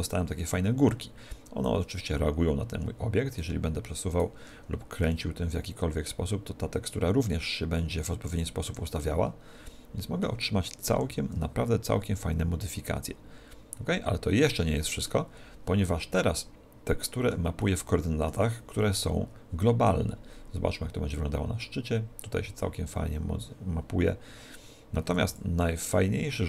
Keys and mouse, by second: 1.7 click, 4.2 right click, 5.2 r, 6.2 r, 9.1-11.1 middle drag, 11.1 r, 15.1-20.0 middle drag, 20.0 click, 26.0-26.4 middle drag.